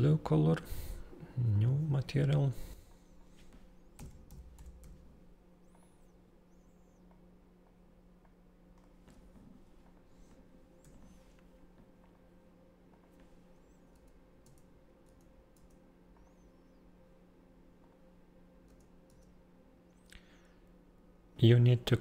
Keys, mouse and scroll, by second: 1.5 click, 2.8 click, 3.3-5.2 typing, 5.7 click, 7.0 click, 8.2 click, 9.8 right click, 10.8 0, 12.0 click, 12.8 click, 13.9 Tab, 14.4 Tab, 15.0 Tab, 15.5 Tab, 16.1 click, 17.7 click, 18.9 Tab, 19.1 Tab.